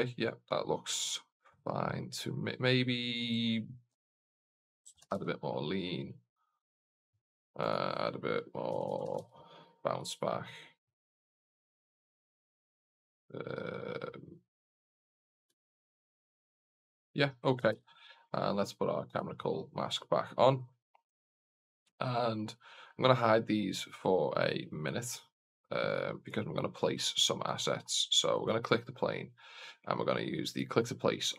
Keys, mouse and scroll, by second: 3.9-6.9 drag, 7.6-13.0 drag, 15.5 KP_0, 17.5 n, 17.8 alt+a, 19.0 click, 24.9 click, 25.7 click, 26.2 click, 26.9-27.4 scroll up 2, 28.2 right click, 28.2 scroll up 3.